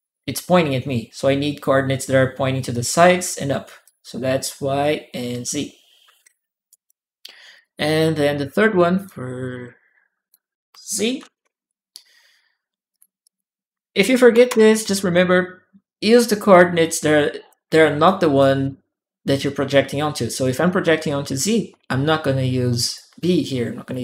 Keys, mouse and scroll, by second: 3.6-5.2 drag, 6.5 click, 7.3 click, 8.1 ctrl+w, 8.5 click, 9.2 click, 9.6 click, 11.1 shift+z, 11.3 Return, 12.7 shift+click, 13.0 shift+click, 14.0 BackSpace, 14.2 Return, 16.6 click, 17.7 click, 18.2 right click, 22.7-24.0 drag.